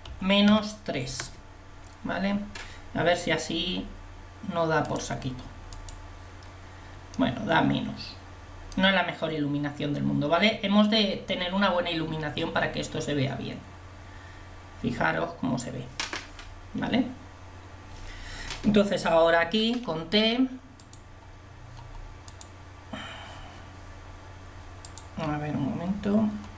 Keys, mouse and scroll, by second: 5.9 click, 19.5 t, 22.3-26.5 drag.